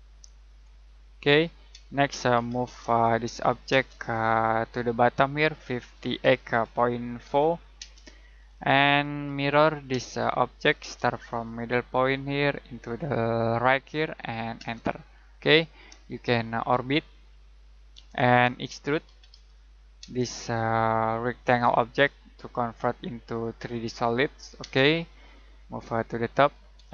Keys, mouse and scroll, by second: 0.8-1.4 scroll up 1, 1.4-1.7 scroll down 1, 1.7 space, 2.3 m, 2.6 space, 3.0 click, 3.7 space, 3.9 click, 5.7-7.7 typing, 8.4 middle click, 9.2 m, 9.9 space, 10.8 space, 14.5 space, 15.2 scroll down 1, 15.5 middle click, 16.1 shift+middle click, 18.1 middle click, 18.7-20.0 typing, 20.3 click, 24.6 space, 26.3 click.